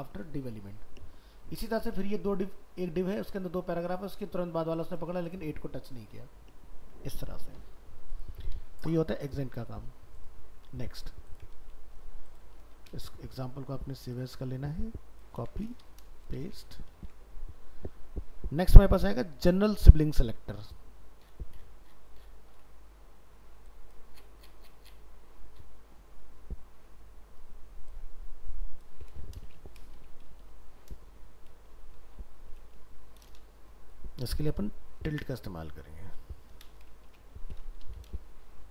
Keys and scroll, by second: 8.6 ctrl+w, 12.6 ctrl+s.